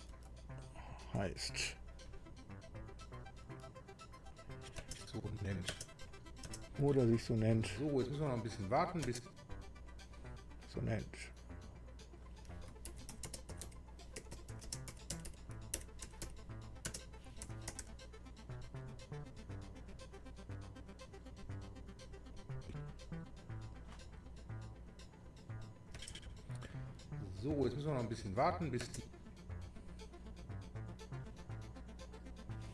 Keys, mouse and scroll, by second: 0.1 BackSpace, 1.0 Right, 4.2 click, 5.4 space, 6.1 click, 6.1 space, 7.0 space, 9.6 space, 9.7 click, 11.7 click, 12.6-18.3 typing, 19.9 click, 21.5 click, 22.3 click, 24.0 click, 25.6 click, 26.0 space, 30.9 click.